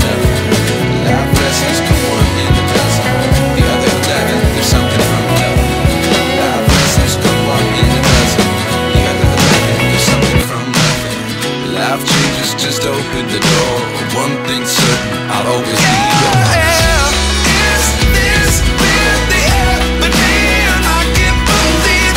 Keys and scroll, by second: 3.5 Tab, 12.3 space, 15.9 space, 20.2 F4.